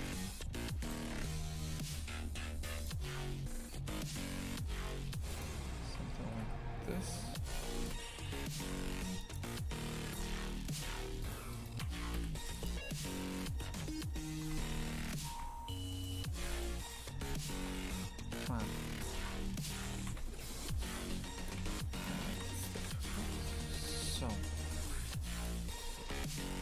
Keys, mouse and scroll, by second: 1.0 shift+f, 3.2 s, 5.8 shift+f, 8.4 right click, 8.6 shift+f, 11.2 shift+right click, 11.5-12.6 shift+right drag, 12.6 Delete, 13.4 KP_Divide, 14.4 shift+f, 15.9 alt+shift+right click, 16.5 alt+shift+right click, 17.2 alt+shift+right click, 18.6 a, 19.1 a, 19.6 alt+shift+right click, 20.0 shift+f, 21.6 a, 21.9 right click, 22.2 shift+right click, 23.1 Delete, 23.4 shift+f, 25.6 2, 26.0 shift+f.